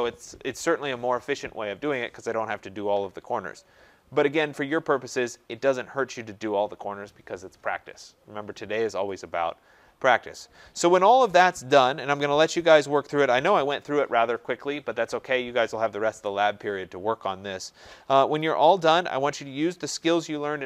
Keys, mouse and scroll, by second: 4.6-8.7 middle drag, 4.6-5.5 scroll up 4, 5.5-8.7 scroll down 4, 8.7-9.8 scroll, 10.0 scroll.